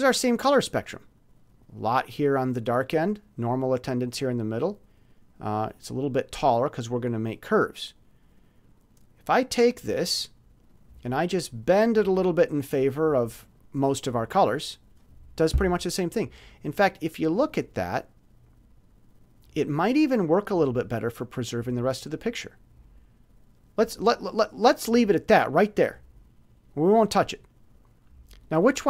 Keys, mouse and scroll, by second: 10.7-13.7 drag, 16.6-20.1 drag, 26.6 click, 28.5 click.